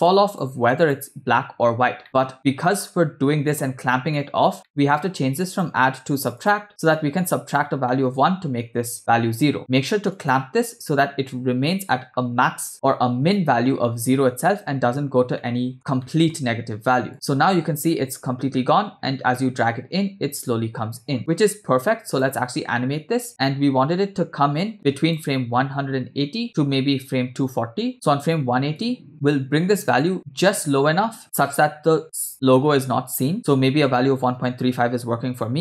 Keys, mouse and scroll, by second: 0.1-0.5 drag, 0.7 click, 2.0 middle click, 2.0 scroll up 2, 2.3-3.6 scroll down 1, 3.6 scroll down 1, 3.8-4.1 scroll up 2, 4.1 middle click, 4.7 middle click, 5.6-6.5 drag, 7.0 middle click, 7.3 scroll down 1, 7.9-8.3 middle drag, 10.4 click, 15.4 middle click, 16.0 middle click, 17.1-22.3 drag, 23.3-25.3 drag, 28.8-33.3 drag.